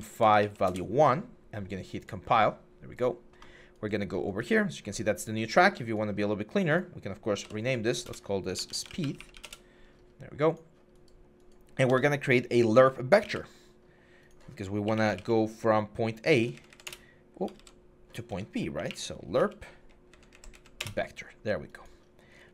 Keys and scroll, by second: 0.0 Tab, 0.2 1, 0.5 Return, 7.3 F2, 7.9-9.2 typing, 9.2 Return, 11.7 Tab, 13.0 typing, 14.6-15.4 typing, 16.0 Down, 16.2 Down, 16.5 Down, 16.7 Return, 17.4 ctrl+z, 18.1 Tab, 18.6-20.1 typing, 19.9 Down, 20.1 Tab, 20.3 Tab, 20.6 Return.